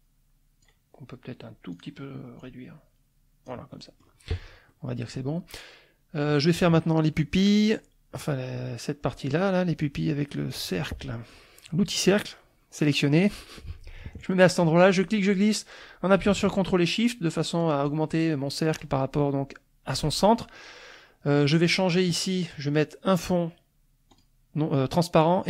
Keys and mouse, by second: 1.7 click, 2.3-3.8 drag, 3.8 middle click, 4.7 middle click, 10.5 click, 11.0 middle click, 15.0-20.1 drag, 24.1 click.